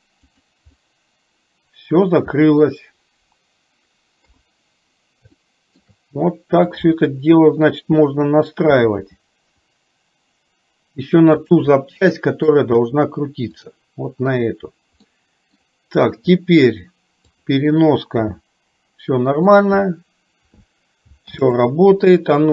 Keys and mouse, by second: 0.8-2.8 middle drag, 4.3 KP_3, 5.4 shift+middle click, 9.0 r, 12.2 middle click, 13.7 click, 15.2 middle click, 17.4 click, 18.3 g, 21.3 ctrl+z.